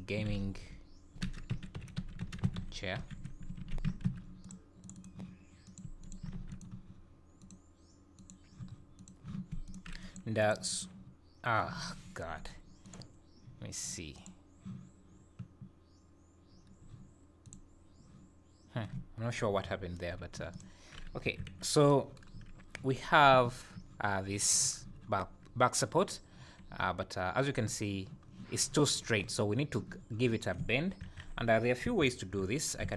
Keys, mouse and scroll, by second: 9.6 click, 10.0 click.